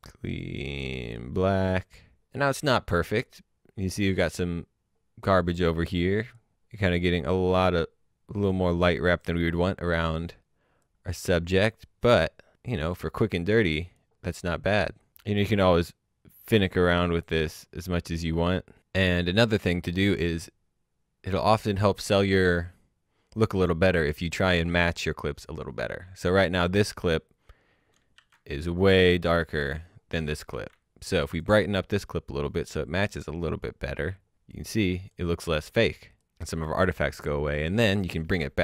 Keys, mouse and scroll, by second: 5.4 click, 10.8 click, 12.0 scroll down 1, 12.3 middle click, 13.1 click, 16.8 click, 20.9 click, 27.9 shift+Num_Lock, 28.1 shift+h, 29.3 click, 30.5 shift+h, 31.1 click, 32.7 click, 37.7 click.